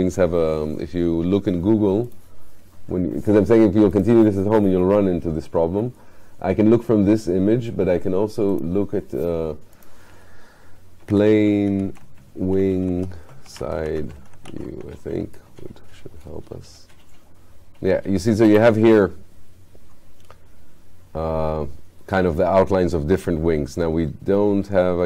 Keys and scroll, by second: 11.1 p.